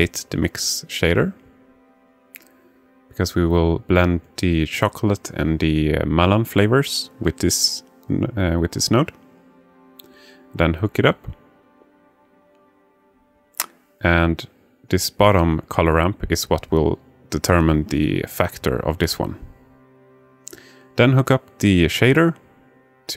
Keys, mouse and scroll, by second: 1.0 alt+shift+middle click, 2.2-3.3 drag, 3.7-4.9 alt+shift+middle drag, 6.4 alt+shift+middle click, 9.1-10.4 drag, 11.5-12.9 drag, 13.2 alt+shift+middle click, 14.3-16.6 drag, 20.5-23.1 drag.